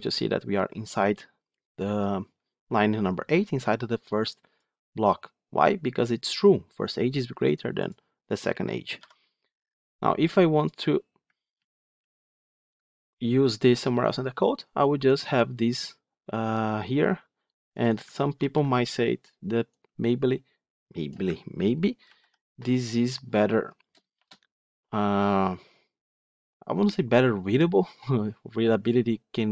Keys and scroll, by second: 8.9 F9, 11.4 ctrl+z, 18.3 ctrl+c, 21.9 ctrl+v.